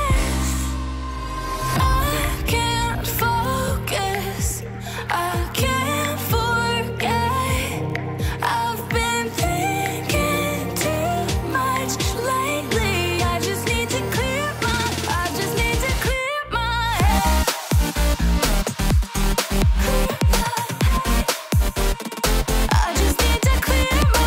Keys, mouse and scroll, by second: 0.4 x, 2.8 x, 4.5 x, 5.6 ctrl+z, 6.1 ctrl+z, 7.3 x, 9.5 x, 13.8 -, 15.1 l, 22.2 alt+Return, 23.5 ctrl+d, 23.9 ctrl+0.